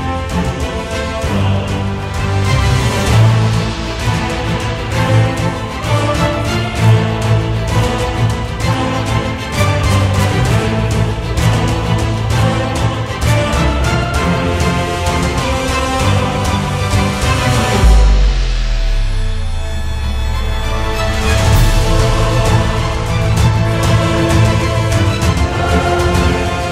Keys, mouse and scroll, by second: 0.0 middle click, 0.3 KP_1, 0.5 ctrl+Tab, 0.6 click, 0.7 ctrl+middle click, 0.8 shift+r, 1.4 ctrl+r, 1.5 middle click, 1.8 shift+click, 1.9 middle click, 2.0 shift+click, 2.3 middle click, 2.3 shift+click, 2.5 middle click, 2.5 shift+click, 2.6 middle click, 2.7 shift+click, 2.8 middle click, 2.9 shift+click, 3.5 ctrl+shift+middle click, 4.2 f, 4.3 shift+click, 4.4 shift+middle click, 4.8 f, 5.0 middle click, 5.2 shift+click.